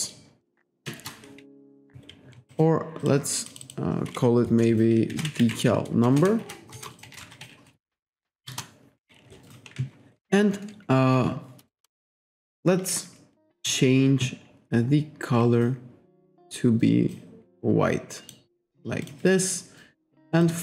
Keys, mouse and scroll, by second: 0.0-0.4 typing, 0.9 Return, 2.6 click, 3.1 click, 3.5 click, 4.9-8.5 typing, 8.5 Return, 11.9-12.4 scroll up 1, 12.5-12.8 scroll down 1, 13.6 click, 17.2 click, 19.1 click, 19.4-19.9 scroll up 1, 20.2 click, 20.5 click.